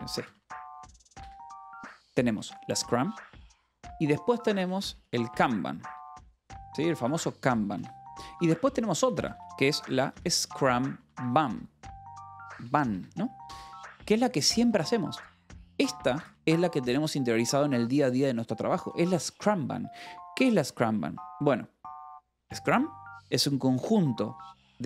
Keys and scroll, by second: 0.3-15.2 typing, 7.8 Escape, 15.7 Escape, 16.6 shift+v, 19.8 Escape, 21.0 k.